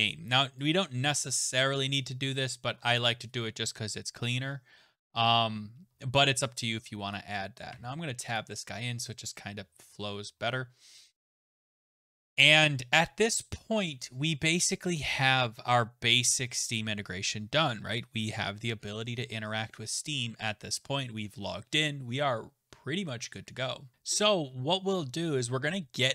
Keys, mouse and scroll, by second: 1.9 click, 2.7-3.1 scroll, 7.1 click, 7.7 Tab, 8.4 click, 14.0-16.3 scroll, 16.3-17.5 scroll, 17.5-18.5 scroll, 18.9-22.5 scroll, 22.7-23.3 scroll, 23.3 scroll, 23.9 ctrl+s, 23.9 click.